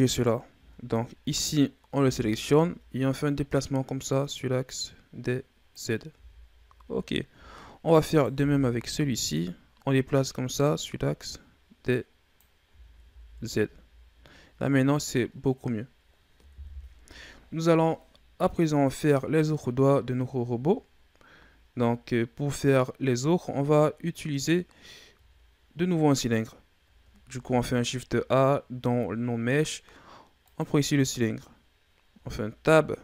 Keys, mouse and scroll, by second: 0.0 right click, 0.5 Tab, 1.3 right click, 1.9 l, 3.1-6.0 drag, 6.0 Tab, 7.2 Tab, 8.0 right click, 8.2 l, 9.2-12.3 drag, 12.5 Tab, 12.9 a, 13.3-14.8 scroll down 5, 14.8-15.5 scroll down 1, 15.5-16.4 scroll down 4, 16.4 KP_1, 19.2-20.7 scroll up 5, 20.7-21.4 scroll down 4, 21.4-22.7 shift+scroll up 2, 24.1-27.1 scroll up 4, 27.1 shift+a, 31.2-32.0 scroll down 4, 32.0 Tab.